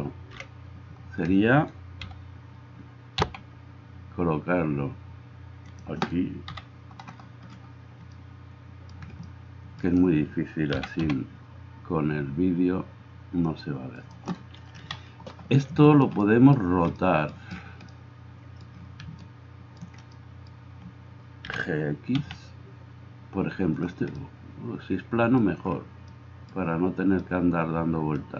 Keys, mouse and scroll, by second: 0.3 KP_1, 2.1 g, 3.2 g, 6.5 KP_7, 10.7 g, 14.9 KP_7, 21.5 g.